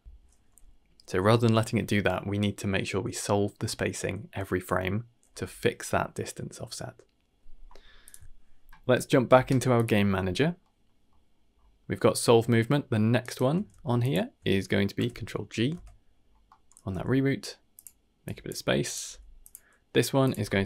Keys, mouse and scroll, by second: 0.0 ctrl+s, 0.0 click, 1.2 n, 8.0 click, 8.2 ctrl+s, 9.7 click, 10.6 middle click, 11.1 middle click, 11.5 scroll up 2, 11.8 middle click, 12.5 shift+middle click, 13.2 shift+right click, 13.7 g, 14.9 ctrl+g, 15.7 Tab, 16.1-16.6 scroll up 3, 16.4 middle click, 16.9 g, 18.2 click, 18.8 click, 19.0 g, 20.2-20.6 drag.